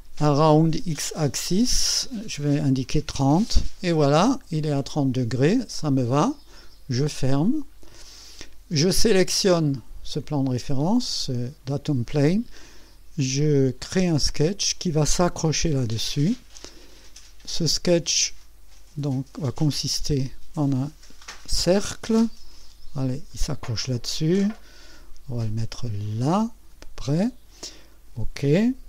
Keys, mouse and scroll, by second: 1.6 click, 3.0 KP_3, 3.2 KP_0, 4.1 click, 6.5 click, 7.4-7.7 scroll down 2, 8.0 click, 9.5 click, 13.8 click, 16.3-16.7 scroll up 2, 16.9-17.8 right drag, 19.0 click, 23.3 click, 25.7 click, 27.9 click.